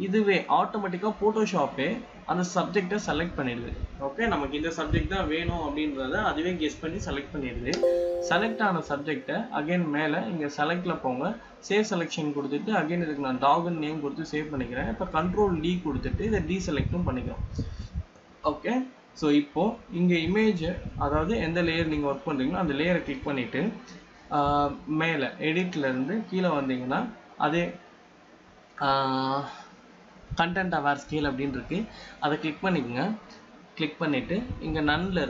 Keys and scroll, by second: 24.0 ctrl+d.